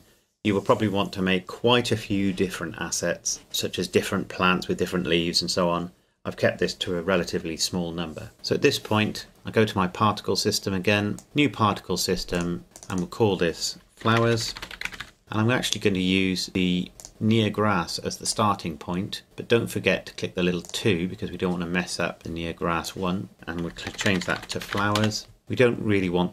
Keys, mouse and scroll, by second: 8.3 right click, 9.3 click, 11.2-13.8 drag, 14.1-15.0 typing, 15.2 Return, 17.0 click, 20.6 click, 22.8 click, 23.9-24.7 typing, 25.0 Return.